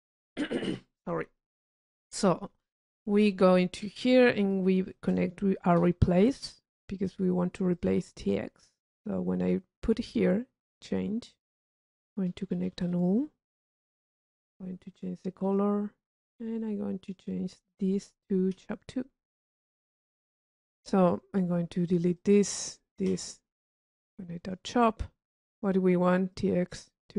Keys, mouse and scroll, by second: 2.2 click, 4.7 click, 7.2 click, 7.9 click, 9.0-10.3 drag, 11.6 click, 12.6 u, 13.2 click, 13.8 click, 15.6 click, 16.6 right click, 17.2 click, 19.8 click, 22.0 click, 25.7 click, 26.5-27.1 drag.